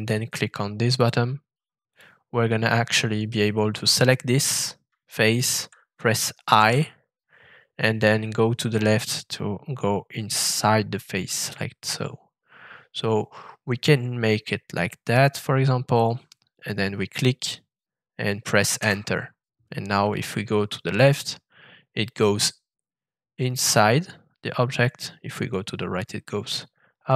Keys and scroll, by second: 6.5 i, 18.8 Return.